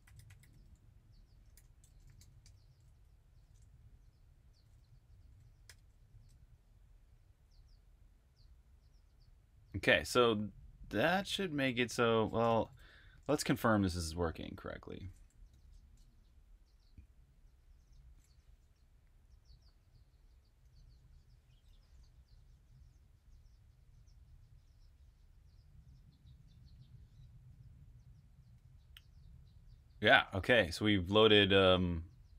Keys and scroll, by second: 0.0-2.6 typing, 3.8 super+], 5.6 super+b, 5.8-6.7 typing, 12.4-14.5 typing, 15.4 super+\, 15.8-18.6 typing, 19.4 Return.